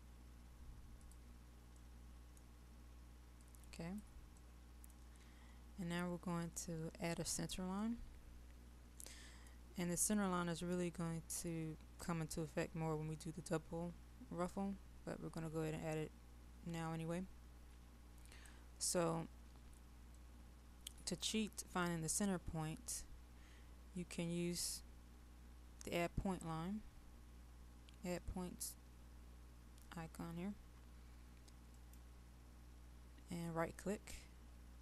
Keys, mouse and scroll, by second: 1.9 middle click, 3.5 click, 4.4 middle click, 5.5-6.1 scroll down 1, 6.1-7.8 scroll up 1, 7.8-10.1 middle drag, 10.1-10.8 scroll down 1, 10.8 middle click, 18.3 click, 19.5-20.2 scroll down 1, 20.2 middle click.